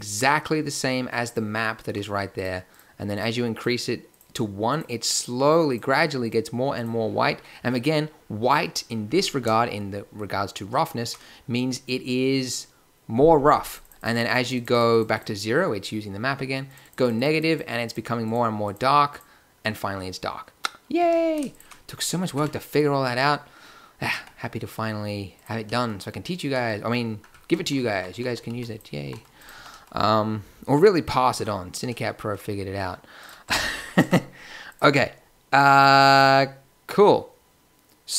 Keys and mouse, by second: 8.5-13.6 middle drag, 15.5-16.9 middle drag, 17.7 middle click, 18.4 middle click, 21.0 x, 22.3 Tab, 24.1 g, 27.8-29.5 typing, 30.0 click, 30.5 click, 33.4 Tab, 33.9 Tab, 34.8 Tab.